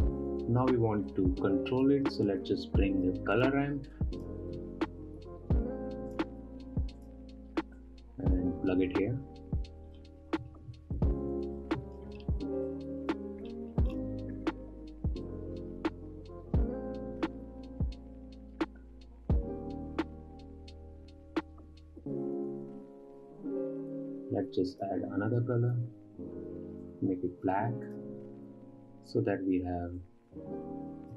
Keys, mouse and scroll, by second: 0.0 scroll down 1, 0.2-1.5 middle drag, 1.5-4.0 drag, 4.3 shift+a, 8.3-10.5 drag, 10.5-12.2 middle drag, 12.2-12.5 drag, 12.5 middle click, 12.8-13.2 scroll up 7, 13.4-15.0 drag, 17.9 click, 18.1 scroll down 4, 18.2-19.3 scroll up 6, 18.3-18.7 middle drag, 19.3-26.1 drag, 28.4 click, 30.5-31.1 drag.